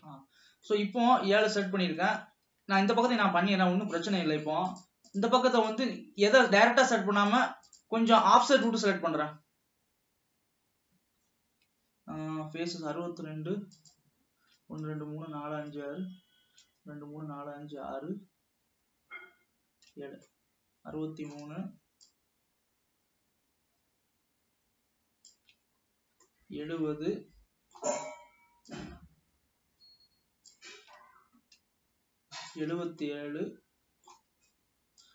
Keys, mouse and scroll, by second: 0.0 shift+click, 0.4 scroll down 1, 0.8-2.4 middle drag, 2.4 ctrl+s, 4.8 shift+click, 5.3 shift+click, 5.8 shift+drag, 7.5 shift+click, 7.8 shift+click, 8.4 shift+click, 8.7 shift+click, 13.9 shift+drag, 20.3 scroll down 1, 20.5-22.3 middle drag, 22.3-22.6 shift+drag, 25.9 scroll down 2, 26.4-29.0 middle drag, 29.0-32.1 shift+drag, 32.5-32.8 shift+drag, 33.3-35.1 shift+middle drag.